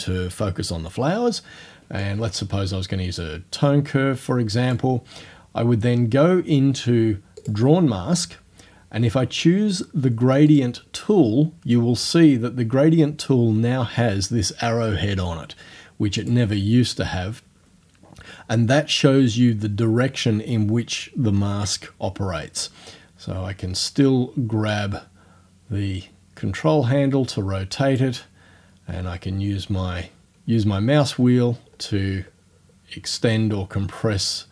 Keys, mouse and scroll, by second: 2.1-4.9 drag, 4.9 middle click, 5.3-5.9 scroll up 1, 5.9-6.5 scroll down 1, 6.5-7.3 scroll up 1, 7.4 click, 7.7-10.5 scroll up 1, 10.5 click, 16.2 click, 24.7-28.2 drag, 28.2-28.7 scroll up 1, 28.7-29.3 scroll up 1, 29.3-29.7 scroll up 1, 29.7 middle click, 29.9 scroll down 1, 30.1 middle click, 30.2-30.6 scroll up 4, 30.6-32.7 scroll down 10.